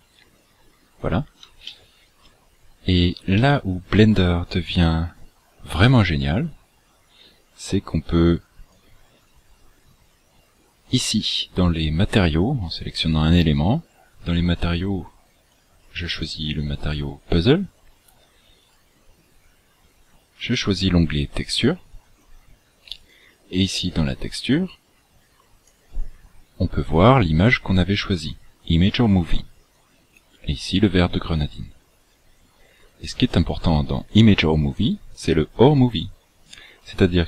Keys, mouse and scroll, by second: 1.7 shift+middle click, 2.6 scroll down 1, 3.4 shift+middle click, 7.7 click, 15.7 click, 18.5 click, 23.1 click, 24.5 click, 29.8 click, 32.9 click, 36.5 click.